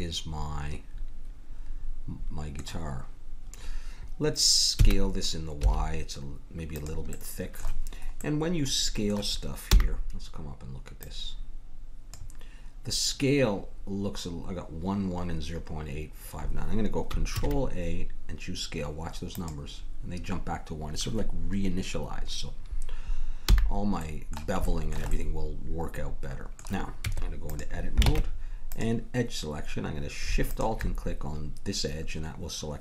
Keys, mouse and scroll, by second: 4.7 s, 7.2 middle click, 8.5 middle click, 9.6 n, 10.9-12.9 drag, 17.3 ctrl+a, 23.4 n, 23.9-27.0 middle drag, 27.0 Tab, 28.1 ctrl+Tab, 30.4-32.7 drag.